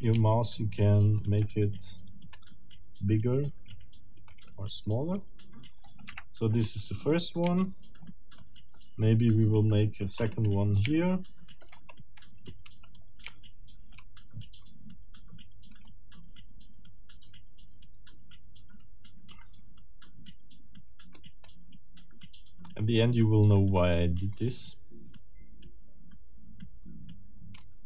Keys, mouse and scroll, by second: 0.3-1.4 shift+middle drag, 2.1-2.5 shift+scroll down 3, 3.4 middle click, 4.3 middle click, 6.1 Escape, 6.4-7.1 scroll down 4, 7.6 shift+middle click, 8.8-9.9 shift+middle drag, 10.2-10.6 shift+scroll up 2, 11.0 shift+middle click, 11.9 shift+scroll up 2, 12.6 c, 13.2 shift+c, 15.8-21.3 drag, 21.4-27.8 drag.